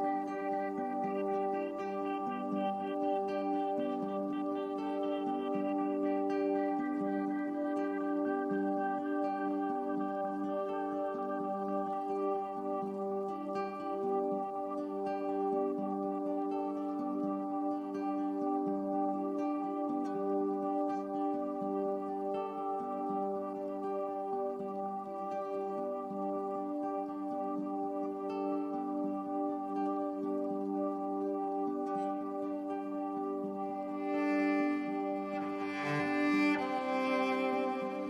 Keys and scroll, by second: 1.1 8, 1.4 Return, 6.1 super+c, 7.3 super+f, 7.9 shift+Right, 11.4 shift+Left, 29.2 super+c, 30.5 super+f, 31.1 shift+Left, 36.7 BackSpace.